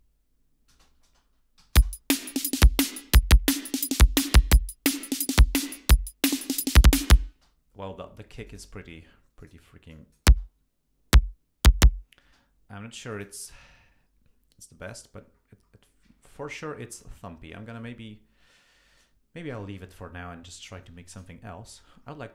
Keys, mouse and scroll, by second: 0.7 space, 1.6 Home, 1.8 space, 7.4 space, 8.5 click, 9.4 click, 9.9 click, 10.3 space, 12.3 space, 13.1 click, 13.6-14.1 scroll down 2, 14.8 click, 15.2-15.5 scroll up 2, 15.6 scroll down 2, 16.6 ctrl+Up, 18.2 scroll up 2, 19.7 ctrl+Down, 20.7 ctrl+Up, 21.9 scroll down 2.